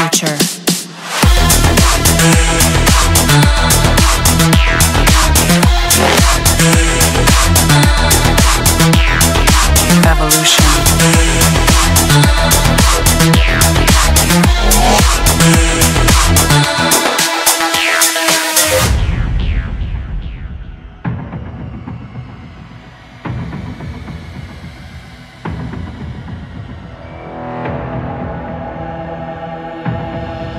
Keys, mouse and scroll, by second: 1.3 click, 1.8-2.8 right drag, 5.0-6.1 drag, 7.1 click, 11.2 click, 14.0 click, 14.2 click, 16.3 click, 17.2 click, 19.3 middle click, 21.7 middle click, 21.8 middle click, 23.2-24.4 scroll, 24.4 scroll.